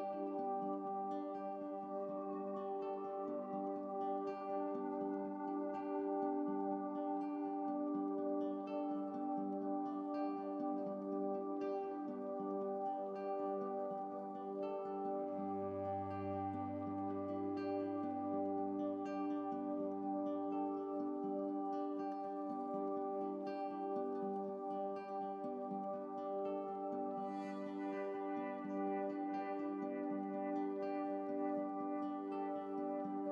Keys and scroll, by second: 26.3 ctrl+b, 28.6 ctrl+b, 32.6 ctrl+z.